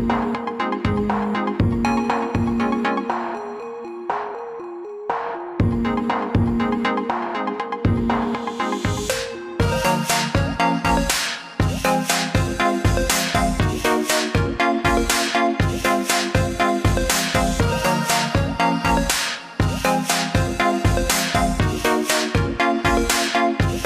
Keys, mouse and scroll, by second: 1.9 click, 7.2 alt+click, 14.5 click, 16.9 click, 18.9 alt+click.